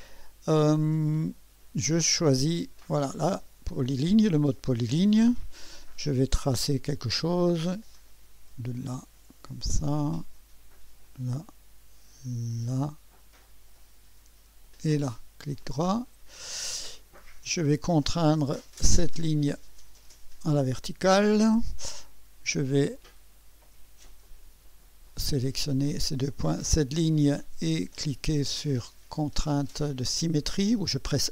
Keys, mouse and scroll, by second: 3.0 click, 7.5 click, 9.3 click, 11.0 click, 12.7 click, 14.6 click, 16.0 right click, 17.9 right click, 19.0 click, 20.6 click, 21.5 scroll up 2, 22.9 click, 24.2 click, 26.3 click, 30.9 click.